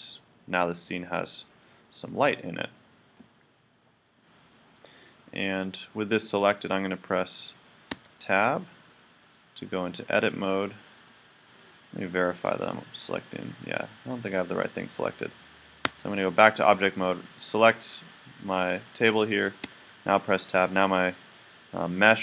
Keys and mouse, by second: 7.2 right click, 8.0 Tab, 8.1 click, 11.6-13.4 drag, 13.4-15.3 right drag, 15.9 Tab, 17.1-19.0 right drag, 19.6 Tab.